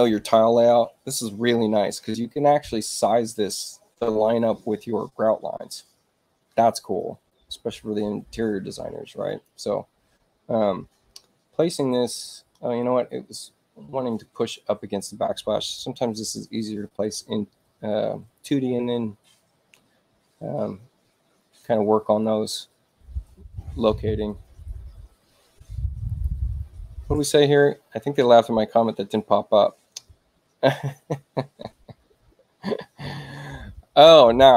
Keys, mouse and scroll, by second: 9.3 click, 10.8 space, 11.6 click, 26.0 click.